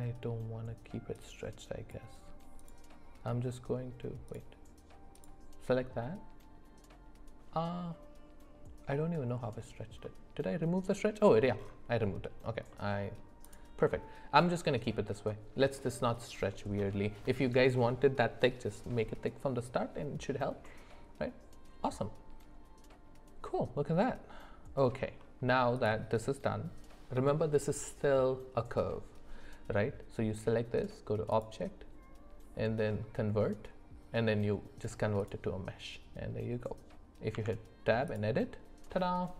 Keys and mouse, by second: 1.1-2.6 drag, 4.3 click, 10.0 middle click, 12.7 middle click, 15.3 middle click, 20.6-25.0 middle drag, 31.4-35.3 drag, 37.3 Tab.